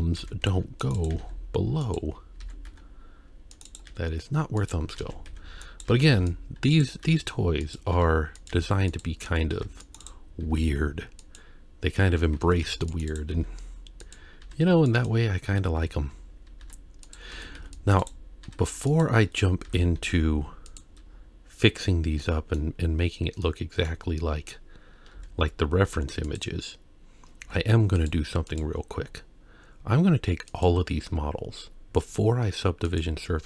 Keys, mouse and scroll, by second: 0.2 alt+a, 0.5 c, 1.1 g, 2.4 alt+a, 2.7 c, 3.9 g, 4.9-8.5 typing, 5.9 alt+a, 9.3 alt+a, 9.5 c, 10.5 e, 12.4 alt+a, 12.6 c, 13.4 e, 14.4 s, 15.8 ctrl+z, 16.6 s, 17.3 alt+a, 17.6 c, 18.4 s, 19.3-19.7 scroll down 2, 19.7 Tab, 20.1 z, 21.1 scroll down 2, 22.2-22.6 middle drag, 22.9-23.4 scroll down 2, 23.4-23.9 middle drag, 24.3-25.2 scroll down 1, 25.2 z, 27.4 z, 28.5 click, 30.5 click, 32.9-33.4 drag.